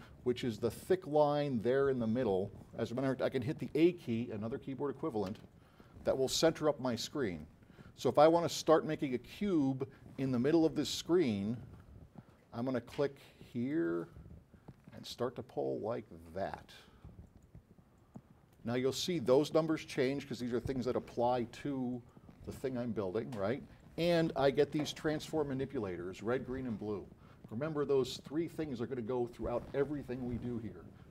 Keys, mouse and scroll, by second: 0.6 scroll up 4, 1.3 middle click, 1.8 middle click, 2.3 middle click, 5.3 a.